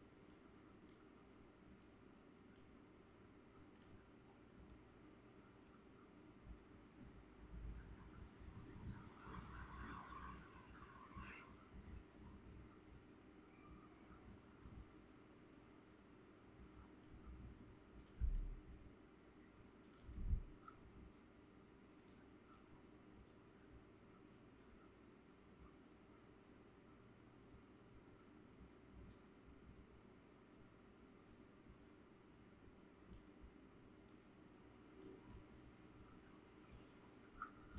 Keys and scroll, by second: 18.2 ctrl+space.